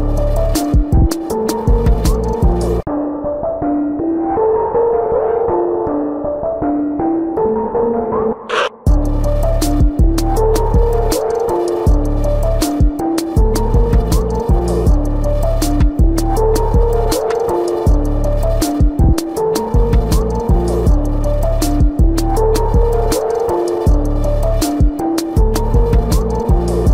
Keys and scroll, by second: 2.4 typing, 3.9 typing, 8.0 ctrl+-, 11.7 ], 19.3 ctrl+-, 19.8 space, 23.6 space, 26.3 space.